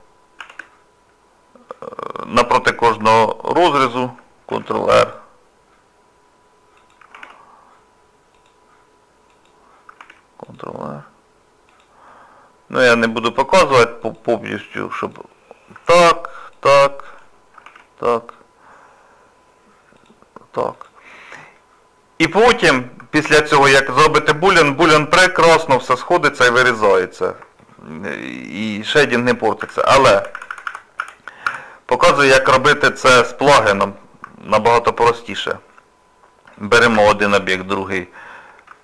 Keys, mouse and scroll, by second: 0.4 ctrl+r, 2.2 scroll down 1, 2.7 scroll down 1, 3.1 shift+middle click, 4.5 ctrl+r, 7.1 ctrl+r, 12.1 middle click, 13.6 ctrl+r, 15.9 ctrl+r, 21.2-21.6 scroll down 1, 21.6 middle click, 22.4 Tab, 24.2 middle click, 25.9 middle click, 27.6 shift+middle click, 29.6-30.6 ctrl+z, 32.1 ctrl+z, 32.8 middle click, 33.1 Tab, 33.5 scroll down 2, 34.0 middle click, 34.8 shift+middle click, 35.3 click, 36.6 click, 37.3 shift+click, 37.4 shift+click.